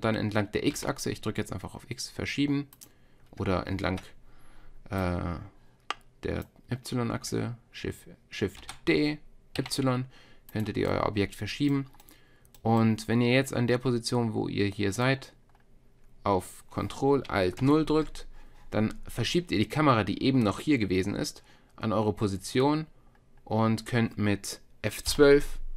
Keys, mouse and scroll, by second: 3.9 ctrl+z, 5.0-7.1 drag, 8.6 shift+d, 10.9 click, 12.0-14.8 drag, 17.6 ctrl+alt+KP_0, 22.4-25.7 middle drag.